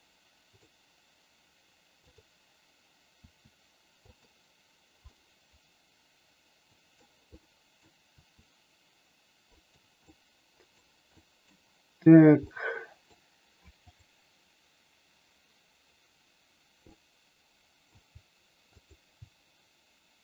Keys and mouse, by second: 0.5 click, 1.9 click, 3.2 r, 4.0 click, 5.0-6.9 middle drag, 7.4 middle click, 8.2 r, 9.5 click, 10.0 middle click, 11.0 middle click, 12.5 middle click, 13.9 click, 16.8-17.8 middle drag, 18.8 shift+click.